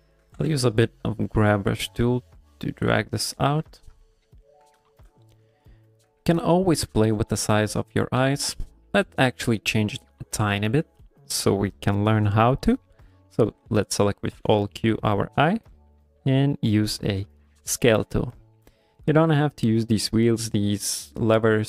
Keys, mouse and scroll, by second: 0.0 shift+middle click, 0.3 g, 0.5 f, 1.0 click, 1.5 click, 1.9 click, 2.2 click, 2.6 click, 2.9 click, 3.2 click, 3.7 ctrl+middle click, 4.0 ctrl+middle click, 4.4 ctrl+middle click, 4.9 shift+middle click, 5.0 shift+middle click, 5.5 ctrl+middle click, 6.5 shift+middle click, 8.2 alt+q, 14.5 alt+q, 17.5 click.